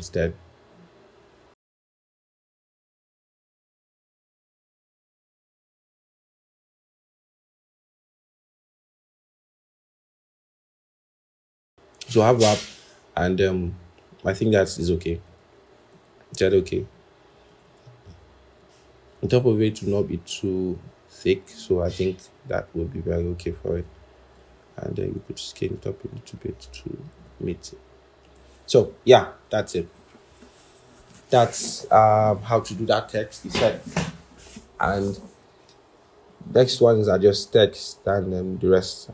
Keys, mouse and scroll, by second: 0.1 shift+Up, 0.2 shift+Up, 0.6 shift+Up, 1.4 shift+Down, 3.2 double click, 16.3-17.5 scroll, 17.5 double click, 25.0 ctrl+shift+., 25.5 ctrl+shift+., 28.8-29.3 scroll, 34.8-35.3 scroll.